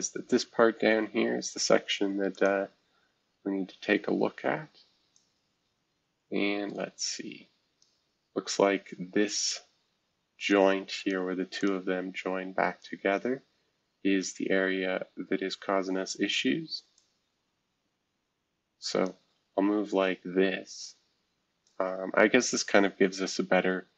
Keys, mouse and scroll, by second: 0.0-0.7 scroll down 1, 0.7-1.3 scroll down 1, 1.3-2.3 scroll down 1, 2.3 click, 3.8-4.6 scroll up 2, 4.6-5.1 scroll up 1, 5.1-7.8 drag, 8.1-10.5 scroll down 3, 10.5 click, 11.6 click, 12.8-14.2 drag, 12.8-14.2 scroll up 1, 14.6-15.2 scroll down 3, 15.7-16.8 scroll up 2, 16.8 scroll up 1, 16.9-19.1 drag, 19.4-22.2 scroll down 2, 23.3-23.9 scroll up 2.